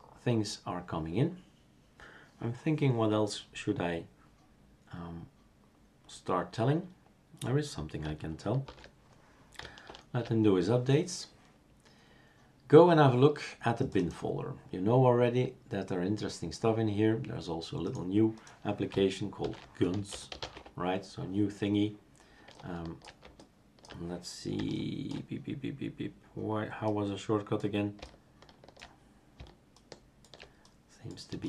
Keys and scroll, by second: 8.6 super+", 9.8 shift+super+Return, 19.4 ctrl+alt+t, 19.7-20.8 typing.